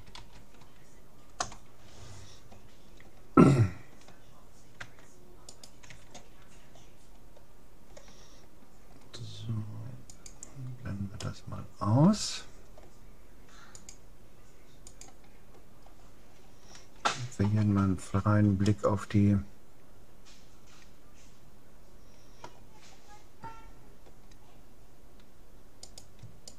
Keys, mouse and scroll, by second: 4.9 Tab, 5.5-7.1 right drag, 5.9 Tab, 7.1-8.9 middle drag, 10.1-11.9 drag, 11.3-12.9 middle drag, 13.7-15.5 drag, 15.8-16.9 middle drag, 17.6-18.7 scroll down 1, 18.7-20.3 middle drag, 22.9-25.5 middle drag, 25.9-26.5 right drag.